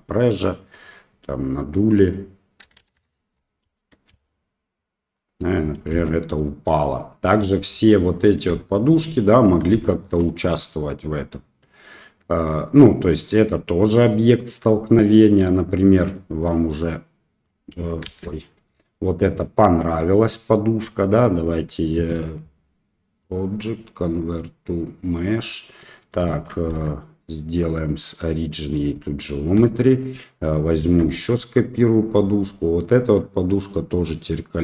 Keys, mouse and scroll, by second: 0.1-3.3 drag, 3.8 space, 5.2-5.7 middle drag, 5.9 space, 6.3-6.9 middle drag, 9.1-9.4 middle drag, 9.9 shift+click, 10.4 middle drag, 11.2-12.0 middle drag, 13.2 click, 15.1 click, 15.8-16.1 middle drag, 16.8 click, 18.1 ctrl+z, 18.7 middle click, 21.1-21.6 middle drag, 23.3-25.2 drag, 25.4-25.8 middle drag, 26.7 w, 29.6 KP_1, 30.8 shift+d, 32.5 click.